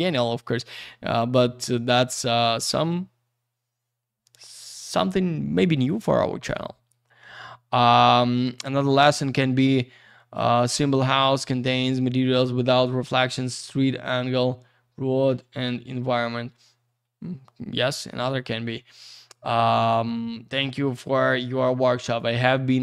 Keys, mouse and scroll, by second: 1.4-2.4 scroll up 1, 2.4-3.1 scroll down 1, 3.1-4.3 scroll up 1, 20.7 click, 22.4 click, 22.5 click, 22.7 click.